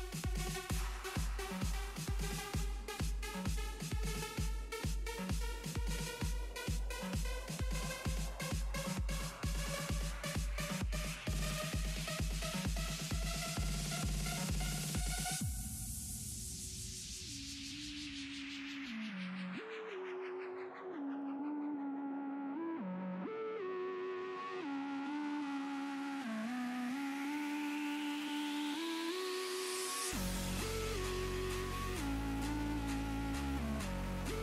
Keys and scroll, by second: 20.8 s, 26.5 s, 27.3 s, 31.4 s, 32.9 s.